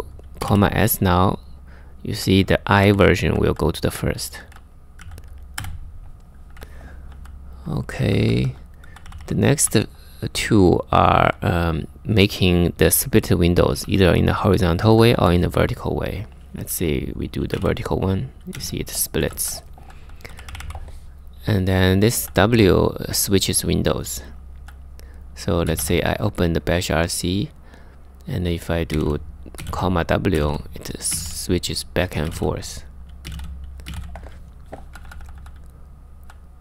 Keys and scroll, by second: 0.0-0.6 typing, 2.0-10.8 typing, 13.5-14.8 typing, 16.9-22.3 typing, 24.2-25.9 typing, 27.2-36.6 typing.